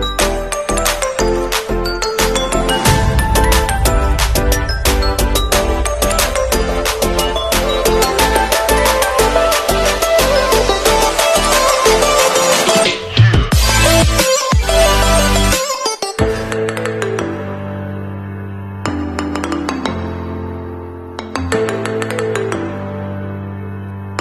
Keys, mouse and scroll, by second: 7.6 right click, 9.2 click, 10.0 alt+scroll up 1, 13.2 alt+click.